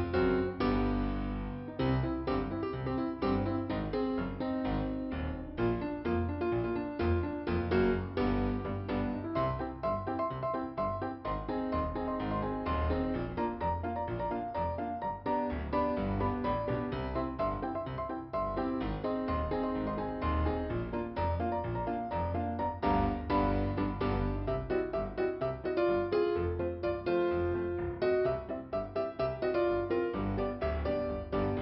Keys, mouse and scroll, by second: 3.3 click, 3.8 click, 3.9 scroll down 2, 4.0 scroll up 1, 4.7 scroll down 1, 5.6-6.7 scroll up 2, 7.1 scroll down 2, 8.0 scroll up 2, 9.1 scroll down 1, 11.6 click, 12.7 click, 15.6 scroll down 2, 16.6 p, 17.2 scroll down 2, 21.2 scroll up 2, 22.4 click, 23.1 click, 23.3 click, 25.2 click, 27.9 scroll up 2, 28.8 click.